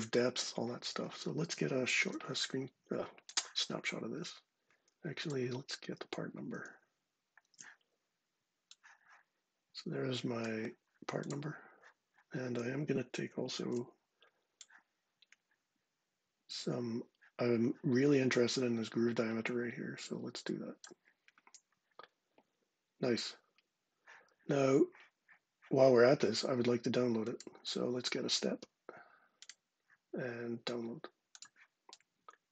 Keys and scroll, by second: 1.7 shift+super+4, 4.8 ↻, 7.2 shift+super+4, 13.4 shift+super+4.